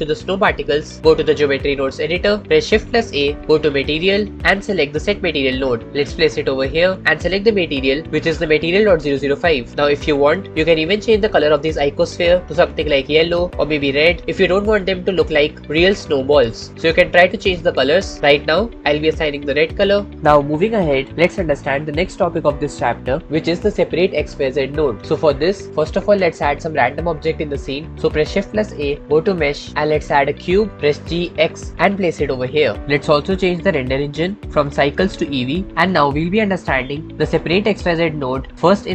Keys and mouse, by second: 3.0 shift+a, 6.8 middle click, 7.0-9.5 drag, 9.6 middle click, 19.4 middle click, 25.2 middle click, 25.7-28.8 middle drag, 28.8 shift+a, 31.0 g, 31.7 x, 34.3 middle click, 34.5-35.9 middle drag, 35.9-37.1 shift+drag, 38.8-38.9 middle drag.